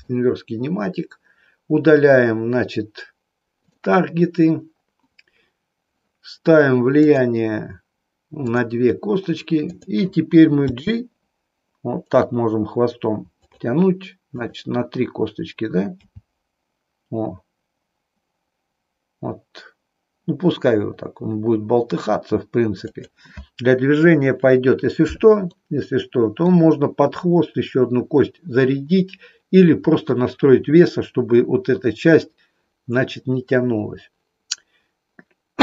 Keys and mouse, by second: 3.5 click, 6.9 click, 8.5 click, 9.7 click, 10.8 g, 13.5 click, 14.4 click, 16.0 g, 25.5-26.7 middle drag.